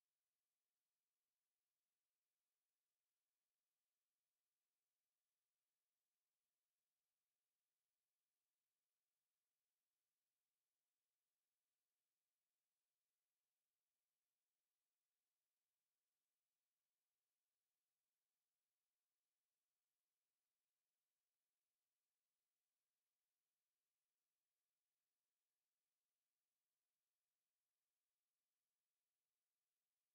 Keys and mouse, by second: 7.2-9.1 middle drag, 11.6 click, 11.6 a, 14.0 middle click, 14.9-16.3 middle drag, 16.3 right click, 19.3 right click, 21.1 click, 24.7-25.8 drag, 26.6-28.2 drag, 29.6 middle click.